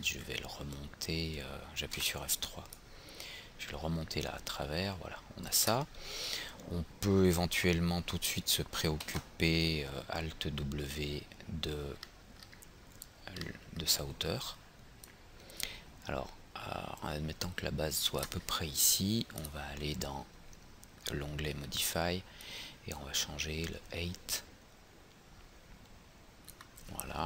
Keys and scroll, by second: 2.0 F3, 9.0 alt+w.